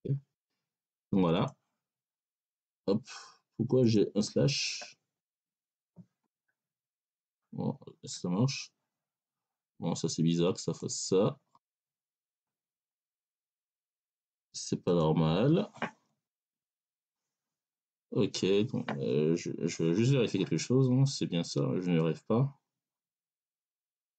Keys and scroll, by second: 5.1 BackSpace, 16.2 BackSpace.